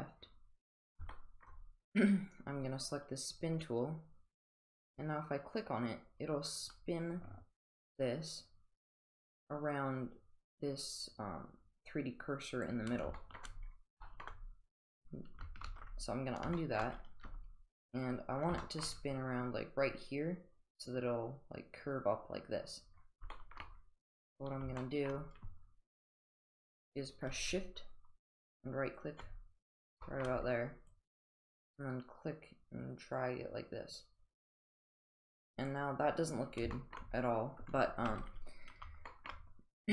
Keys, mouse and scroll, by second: 1.1-1.4 shift+middle drag, 4.4-12.6 drag, 13.2 shift+middle drag, 14.0 shift+middle drag, 15.7 ctrl+z, 16.5 shift+middle drag, 17.2 g, 18.6 shift+middle click, 23.3 shift+middle click, 24.8 shift+middle click, 28.9 shift+right click, 30.0 shift+middle drag, 30.9-35.8 drag, 36.7 shift+middle drag, 39.1 shift+middle drag.